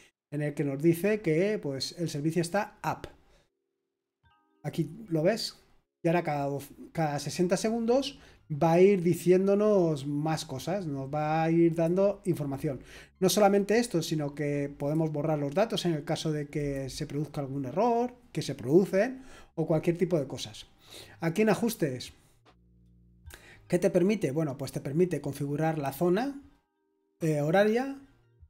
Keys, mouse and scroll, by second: 3.6-5.6 scroll up 1, 9.5-10.7 scroll down 1, 11.7-17.0 drag, 17.1-17.7 scroll up 1, 17.7-21.3 scroll up 1, 21.3-26.4 drag, 26.4-27.6 scroll down 1, 27.6-28.4 scroll down 1.